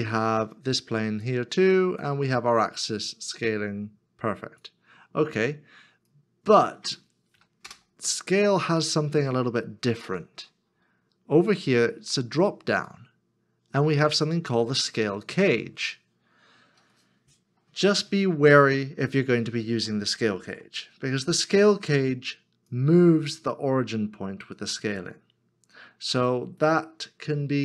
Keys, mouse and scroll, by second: 7.4 KP_1, 7.6 Return, 16.9 middle click, 19.0 middle click, 19.6 scroll up 1, 19.8 shift+scroll down 1, 20.3 shift+middle click, 20.9 shift+middle click.